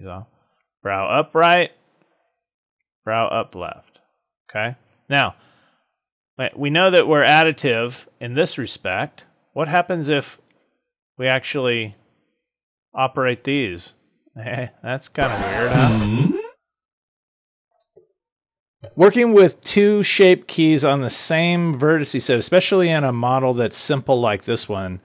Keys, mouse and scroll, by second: 0.5 click, 2.7 click, 6.4 click, 7.5 click, 10.4 click, 17.6 click.